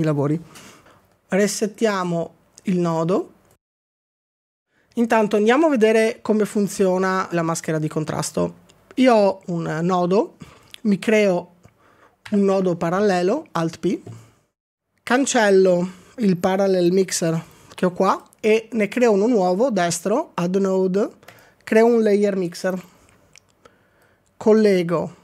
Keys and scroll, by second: 1.0 z.